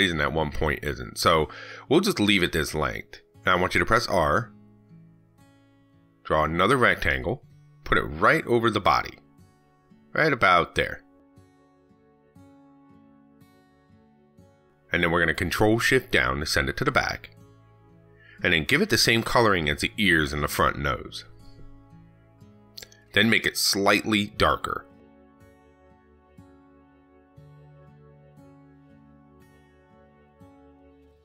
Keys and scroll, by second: 15.4 ctrl+shift+Down.